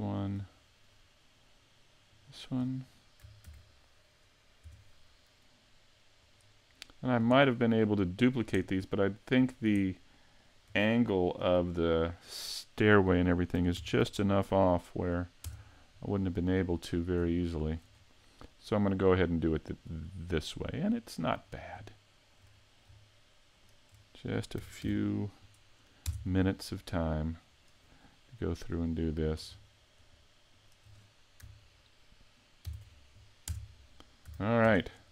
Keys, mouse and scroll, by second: 0.5 shift+middle click, 2.1 shift+right click, 3.4 ctrl+e, 6.2 right click, 6.8 middle click, 7.3 shift+middle click, 8.6 middle click, 9.8 middle click, 9.9 shift+middle click, 11.2 shift+right click, 11.7 middle click, 13.7 ctrl+e, 16.5 middle click, 17.3 shift+middle click, 17.9 scroll up 7, 19.7 right click, 20.1 middle click, 20.9-21.5 scroll down 7, 21.8 shift+middle click, 23.5 shift+right click, 24.0 middle click, 24.8 ctrl+e, 27.5 right click, 27.9 middle click, 28.9 shift+middle click, 29.5-30.5 scroll up 5, 30.5 shift+right click, 32.6 ctrl+e, 34.2 a, 34.6 Tab, 34.8-35.1 scroll down 13.